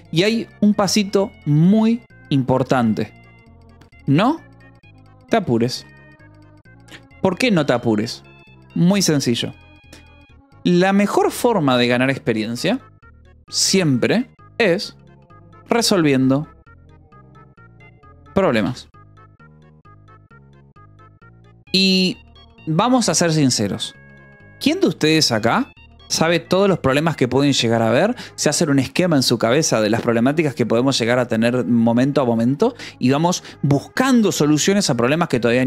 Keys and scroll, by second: 1.4 Escape, 2.1 o, 2.5 -, 2.7 space, 4.1-5.8 typing, 13.6-14.5 typing, 15.7-18.8 typing, 24.6 shift+;.